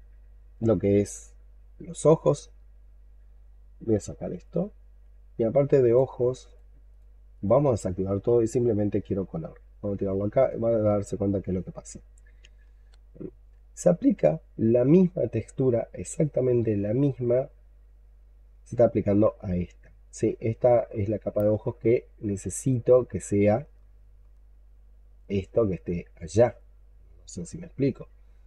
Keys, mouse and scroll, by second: 6.8 double click, 7.2 double click, 12.5-13.3 scroll up 8, 13.3-14.6 scroll down 2, 14.6-15.1 scroll down 1, 15.2-16.4 scroll up 14, 16.4-17.1 scroll down 6, 17.3 alt+middle click, 18.7 alt+middle click, 20.4-20.7 scroll down 3, 20.9 alt+middle click, 21.4-23.0 alt+scroll up 5, 23.0-23.5 scroll up 4, 23.6 alt+middle click, 25.2 alt+middle click, 26.5-27.7 scroll down 10, 27.9 alt+middle click.